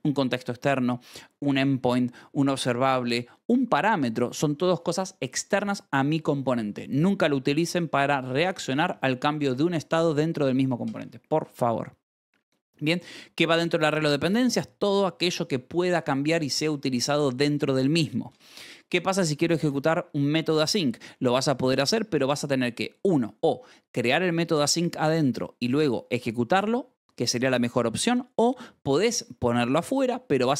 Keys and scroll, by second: 10.8 Escape, 11.6 j, 13.0 v, 14.2 Escape, 18.2 Escape, 18.7 j, 19.6 shift+v, 20.6 Escape.